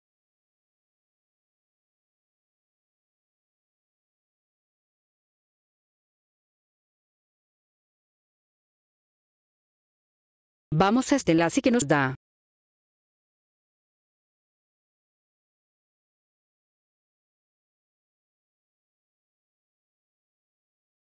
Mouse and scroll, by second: 3.1 click, 6.4 click, 10.2 click, 13.0 right click, 16.3 click.